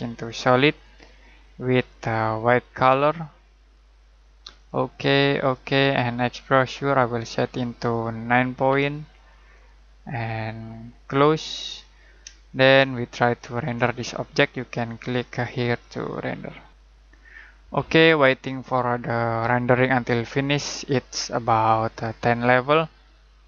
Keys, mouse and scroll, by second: 8.5 KP_9, 9.5 click, 12.5 middle click, 14.8 click.